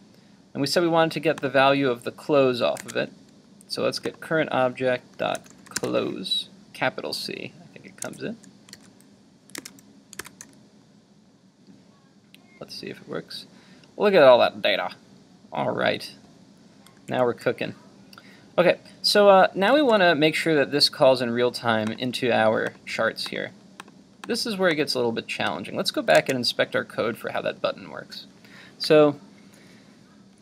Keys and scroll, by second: 2.8 super+Tab, 8.7 super+s, 9.6 super+s, 9.7 super+Tab, 10.2 super+r, 17.0 super+Tab, 26.2 super+Tab.